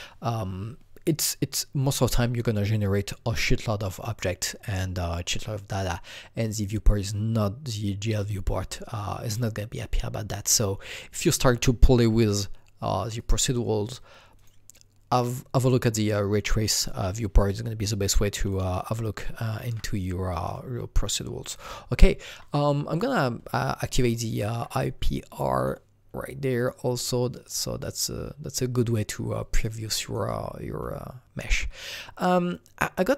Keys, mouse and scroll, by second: 13.2 click, 17.3 click, 17.5-18.8 alt+drag, 18.8 alt+double click, 19.4 alt+click, 21.5 alt+click, 24.0-27.8 alt+middle drag, 25.6 click, 26.6 click, 27.8-29.3 alt+drag, 29.3 alt+double click, 29.8-33.1 alt+right drag, 30.3-33.1 alt+drag.